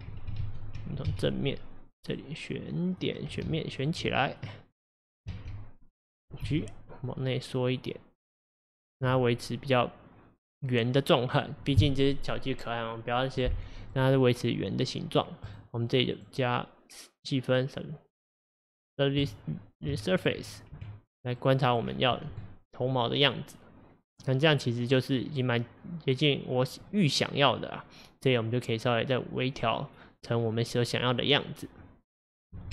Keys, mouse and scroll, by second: 0.5 ctrl+z, 1.1 KP_1, 2.2 click, 3.5 alt+z, 3.9 alt+click, 4.0 alt+z, 4.8 click, 5.4 alt+z, 6.5 g, 9.2-12.2 middle drag, 14.0-15.5 middle drag, 15.5 click, 16.2-19.2 drag, 20.0 shift+middle click, 20.8 Tab, 21.4-21.9 middle drag, 21.9-22.5 scroll down 6, 22.5-24.5 middle drag, 24.5-26.2 scroll up 5, 26.2-26.9 scroll down 4, 26.9-29.9 middle drag, 30.0-30.4 scroll up 2, 30.4-32.7 middle drag.